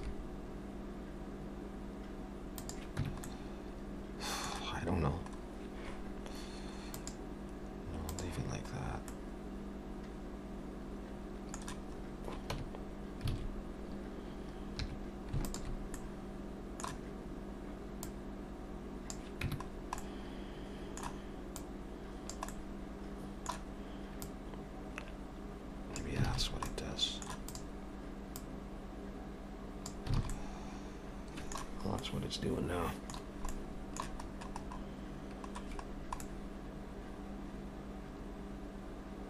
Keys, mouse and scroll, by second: 0.0 e, 3.0 Tab, 3.3 middle click, 7.0 click, 8.1 click, 9.1 middle click, 12.6 Tab, 13.3 alt+a, 14.8 2, 15.5 alt+shift+click, 16.0 middle click, 18.1 click, 19.5 Tab, 19.7-20.6 scroll down 2, 20.0 middle click, 21.6 click, 22.5 middle click, 24.2 click, 26.3 alt+a, 26.4 scroll down 2, 26.6 middle click, 27.5 click, 28.4 click, 30.2 alt+a, 30.3 middle click, 32.0 middle click, 33.3 scroll down 2, 33.5 middle click, 34.3-34.9 scroll up 5, 35.9 scroll down 2, 36.2 middle click.